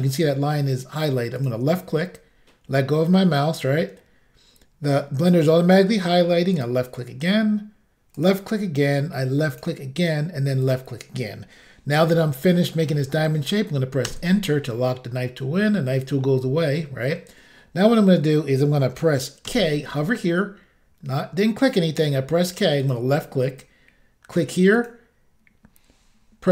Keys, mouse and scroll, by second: 1.4 click, 1.5 click, 6.6 click, 8.3 click, 9.5 click, 9.6 click, 10.6 click, 10.7 click, 14.1 Return, 15.6 middle click, 19.5 k, 22.9 click, 24.1 click, 24.8 click, 24.9 click.